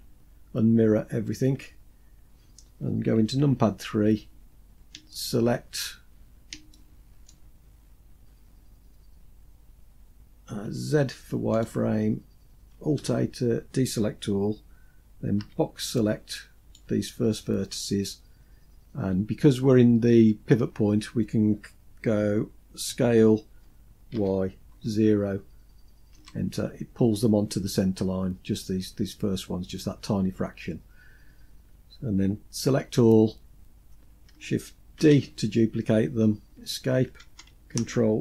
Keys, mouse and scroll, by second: 2.7 KP_3, 4.5 shift+middle click, 5.4-5.9 scroll up 3, 6.1 shift+middle click, 6.9-8.2 scroll up 5, 10.0 z, 12.4 alt+a, 14.7 b, 22.3 s, 26.3-27.4 scroll down 4, 27.4-29.3 scroll down 1, 29.3-29.9 scroll down 2, 30.5-31.0 scroll down 2, 32.0 a, 34.3 shift+d.